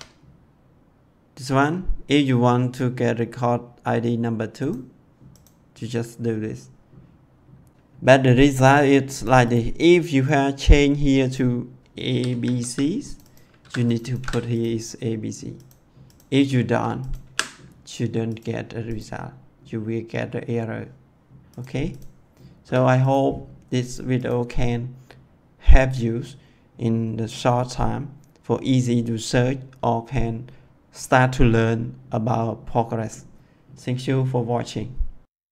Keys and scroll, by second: 11.6-13.0 typing, 13.5 ctrl+c, 14.1 ctrl+v, 17.1 d, 22.5 BackSpace.